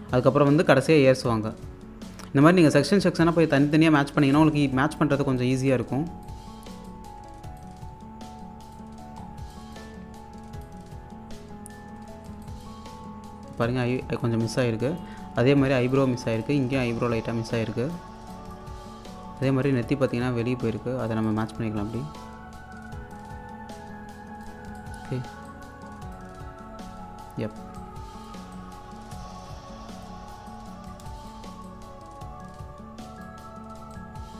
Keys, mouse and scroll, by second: 2.3 scroll up 1, 2.6-5.4 drag, 6.5-8.9 drag, 8.9 scroll down 1, 9.5 alt+click, 10.0-10.7 scroll up 1, 10.7-12.4 drag, 12.9-13.6 scroll up 1, 13.6-18.2 drag, 18.2 scroll down 1, 18.3 alt+click, 19.3 scroll down 1, 19.5-26.7 alt+drag, 26.7-27.1 scroll down 1, 27.8-33.5 drag, 33.5-33.9 scroll down 1, 33.9-34.3 drag.